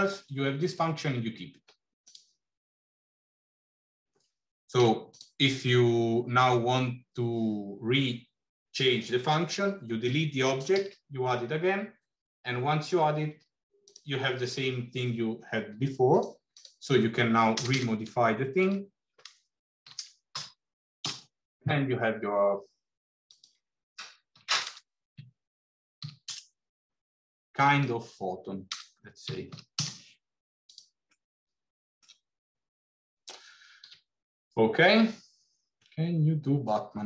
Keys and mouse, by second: 4.6 x, 10.6 shift+a, 16.0-22.0 drag, 17.6 BackSpace, 23.1-27.0 drag, 24.5 KP_0, 27.6-30.2 drag, 27.6-30.2 right drag, 31.0 middle click, 33.8 alt+h.